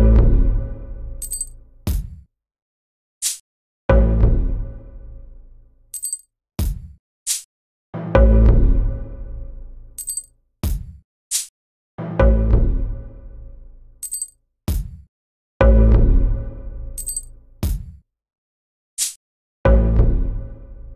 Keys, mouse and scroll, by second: 0.2-0.6 drag, 1.1 drag, 1.5 click, 2.8 click, 3.1 click, 4.0 click, 4.5 click, 6.1 click, 6.5 click, 6.5 right click, 8.0 click, 8.4 click, 9.0 click, 9.4 click, 9.9 drag, 9.9 right drag, 10.7 click, 11.3 click, 12.0 click, 12.6 click, 13.8 click, 14.2 click, 15.8 click, 15.8 right click, 18.5 click, 19.3 ctrl+click.